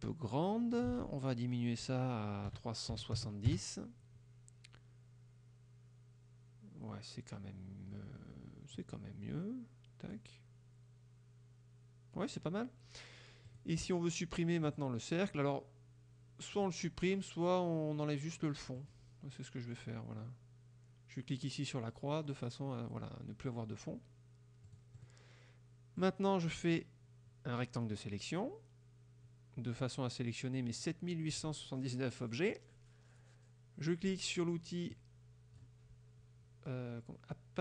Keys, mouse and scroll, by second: 0.8 ctrl+click, 1.0 ctrl+a, 2.5 KP_3, 3.0 KP_7, 3.2 KP_0, 3.6 KP_Enter, 8.8-10.4 drag, 13.6 click, 14.7 click, 16.7 click, 18.8 click, 24.7-25.3 drag, 26.1-27.9 drag, 35.0 click.